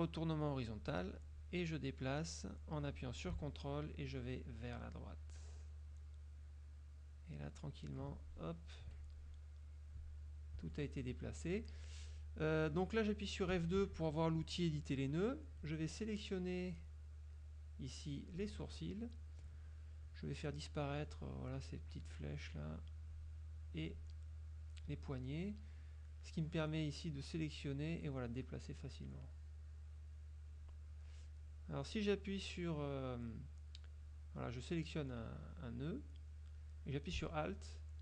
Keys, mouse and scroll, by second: 0.6 click, 2.3-7.9 drag, 8.9 F2, 10.7 F1, 13.6 F2, 14.8 click, 16.8-18.6 drag, 21.3 click, 23.3 click, 24.0 click, 27.2-30.9 drag, 34.1-38.0 drag.